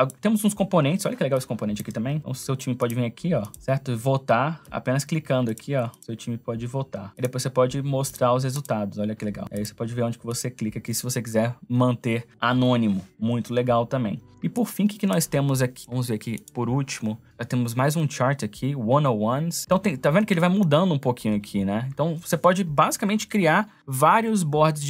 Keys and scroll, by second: 14.3 space.